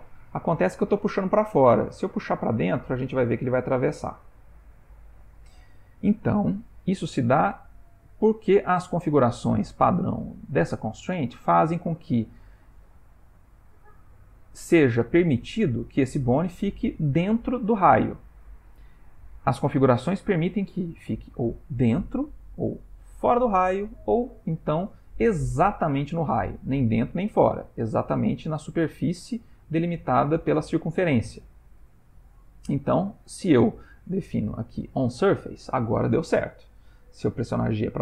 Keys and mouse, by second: 18.7 click, 36.6 click, 37.0 g.